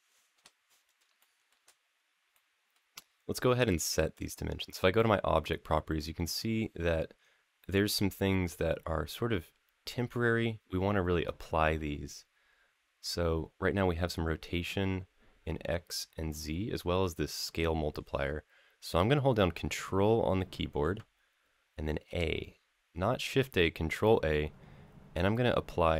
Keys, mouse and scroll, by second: 0.1 KP_Decimal, 1.0 shift+middle click, 1.5-2.0 scroll up 2, 2.1 middle click, 3.9 click, 19.5-20.6 middle drag, 21.8 ctrl+a.